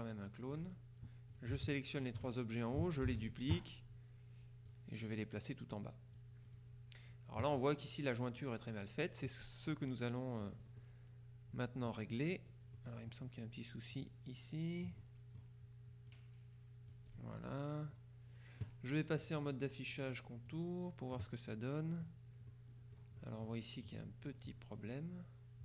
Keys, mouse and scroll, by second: 1.4-2.7 shift+drag, 3.1 ctrl+d, 4.7-7.1 drag, 10.8 click, 12.9 click, 14.0 click, 15.1 click, 16.2-17.7 drag, 19.3 click, 20.6 click, 21.6-22.6 middle drag, 22.6-23.3 scroll up 2, 23.3 middle click, 23.5 scroll up 2, 24.0 click, 24.5 middle click, 24.8-25.6 scroll up 2.